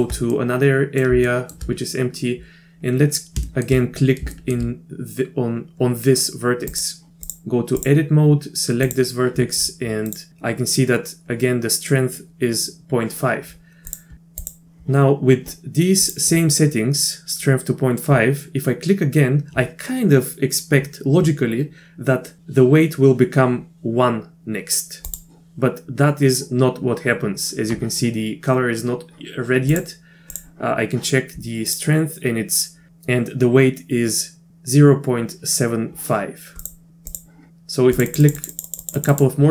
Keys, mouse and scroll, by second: 0.3 middle click, 1.3 shift+middle click, 3.5 shift+middle click, 4.3 shift+middle click, 6.7 click, 7.2-7.9 drag, 8.8 click, 10.1 click, 14.0-14.5 drag, 16.0 click, 25.1 click, 29.7 click, 31.7 drag, 36.8-37.2 drag, 38.0 click, 38.1 click, 38.2 click, 38.4 click, 38.5 click, 38.8 click, 39.0 click, 39.1 click.